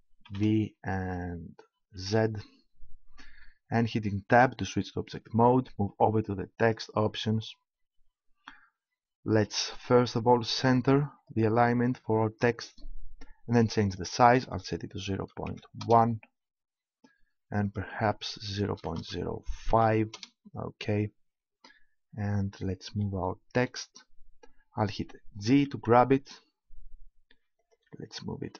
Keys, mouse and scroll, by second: 0.3 shift+v, 1.9 shift+z, 4.4 Tab, 6.6-7.9 drag, 7.9-12.9 middle drag, 15.5 middle click, 17.6-19.1 drag, 25.4 g, 27.7-28.5 drag.